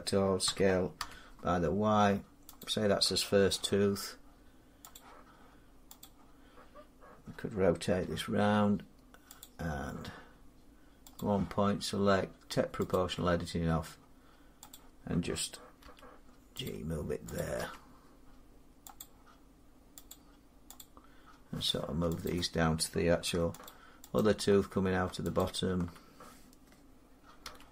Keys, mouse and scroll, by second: 0.3 s, 0.8 y, 2.4 click, 3.1 s, 3.2 y, 3.3 s, 3.7 y, 4.9 click, 5.9 click, 7.8 r, 9.3 click, 11.0 click, 12.8 click, 14.9 click, 15.7 g, 16.5 click, 17.5 click, 17.5 g, 18.8 click, 20.2 click, 20.6 click, 23.5 shift+click, 23.9 shift+click, 24.0 click, 25.2 shift+click, 27.3 g.